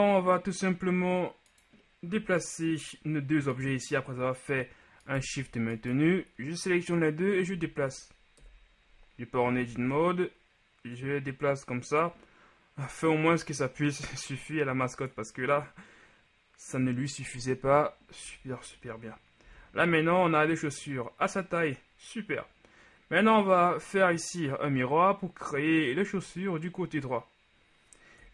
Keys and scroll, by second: 7.7 Tab, 8.6 KP_1, 9.7 a, 10.0 a, 18.5 Tab, 19.6 a.